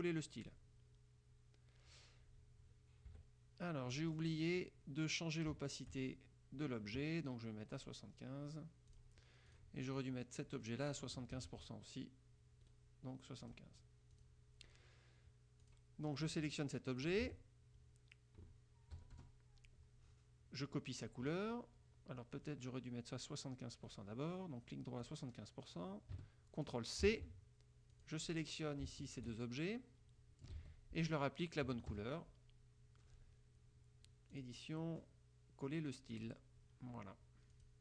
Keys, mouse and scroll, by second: 0.5 click, 3.2 KP_Subtract, 4.1 click, 7.9 right click, 9.0 click, 9.6 click, 10.1-11.2 drag, 11.5 ctrl+z, 12.7 right click, 13.5 click, 14.3 click, 15.7 click, 16.1-17.3 drag, 17.3 ctrl+z, 19.1 KP_Subtract, 19.3 KP_Add, 24.0 click, 25.2 click, 27.2 ctrl+c, 28.1 click, 29.2 shift+click, 29.6-30.8 shift+drag, 30.7 ctrl+z, 31.8 KP_Subtract, 32.1 KP_Add, 34.5 click, 36.3 click, 37.7 click.